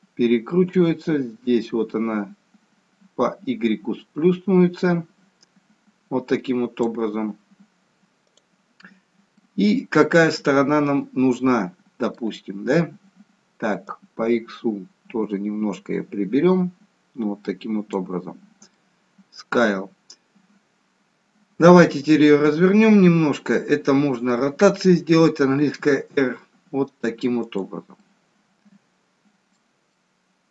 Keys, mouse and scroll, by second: 1.0 click, 9.4 middle click, 13.8 click, 18.6 middle click, 22.1 middle click, 25.6 r, 27.9 middle click, 29.9 middle click.